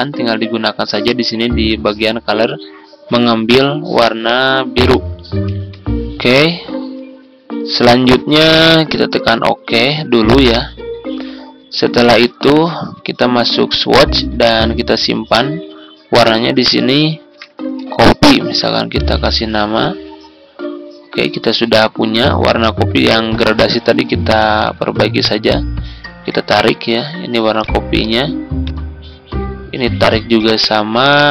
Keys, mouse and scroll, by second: 8.8 click, 17.0-18.1 typing, 19.6-31.3 drag.